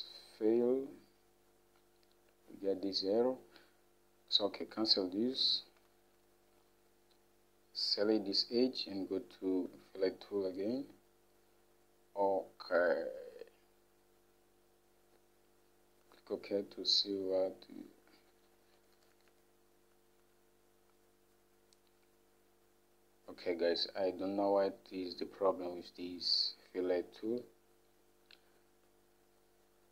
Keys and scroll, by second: 6.0 Home, 18.9 F5, 19.1 F5, 19.3 F5, 19.4 F5.